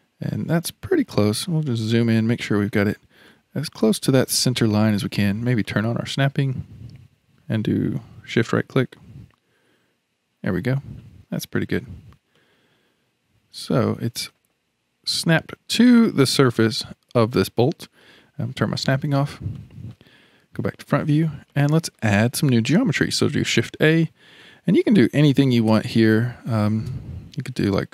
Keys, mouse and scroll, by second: 0.7-1.2 scroll up 9, 1.2-3.0 shift+middle drag, 3.0-3.3 scroll up 3, 3.3-5.6 shift+middle drag, 5.6 click, 8.4 shift+right click, 11.2-12.3 scroll down 7, 12.3-15.4 middle drag, 15.7-18.7 middle drag, 18.8 click, 19.6-20.5 shift+middle drag, 20.5 KP_1, 21.5-23.5 shift+middle drag, 23.5 shift+a.